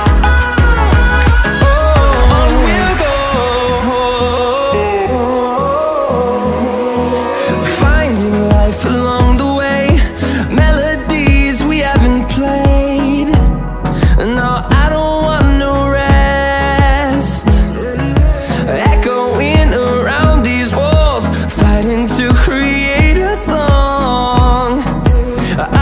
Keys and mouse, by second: 0.8 click, 2.9 Tab, 3.3 u, 4.4 click, 5.3 g, 8.0 click, 8.2 click, 9.3 r, 15.8 s, 16.6 s, 18.2 g, 22.4 s, 23.2 g, 24.9 s.